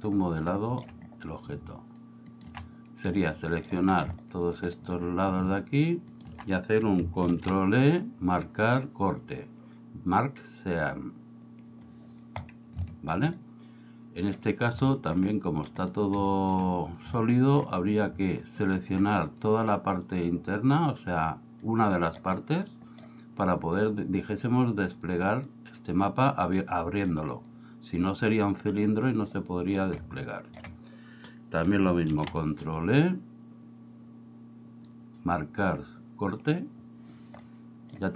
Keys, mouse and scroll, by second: 0.7 shift+middle click, 2.4 alt+shift+right click, 3.2 shift+middle click, 4.2 shift+middle click, 6.1 alt+shift+right click, 7.3 ctrl+e, 12.4 middle click, 12.9 shift+middle click, 13.4 middle click, 14.9 shift+middle click, 15.4 middle click, 15.8 middle click, 16.4 shift+middle click, 17.2 shift+middle click, 18.7 alt+right click, 20.3-22.2 middle drag, 22.7 middle click, 24.0 middle click, 26.8 middle click, 29.4 middle click, 30.2 shift+middle click, 32.1 ctrl+e, 37.5 middle click.